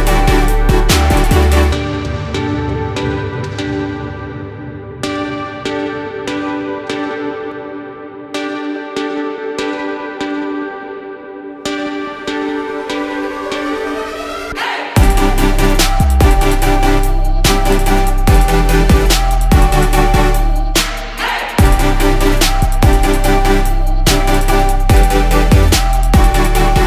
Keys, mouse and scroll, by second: 2.3 right click, 4.2 ctrl+scroll, 10.1 click, 11.3 KP_0, 13.7 click, 14.6 ctrl+e, 19.1-20.1 drag, 20.0-20.9 typing, 21.2 Return, 23.7-25.1 drag, 25.9 ctrl+e.